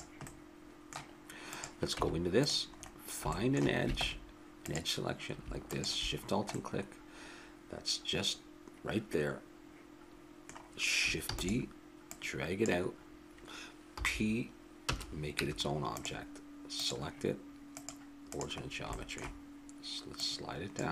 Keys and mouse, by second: 0.2-1.5 middle drag, 1.5-3.3 drag, 2.0 Tab, 4.0 ctrl+Tab, 5.6-6.7 drag, 7.2-8.3 middle drag, 11.3 shift+d, 12.1-14.0 drag, 14.0 p, 15.4 Tab, 16.7-19.5 drag, 20.2-20.9 drag.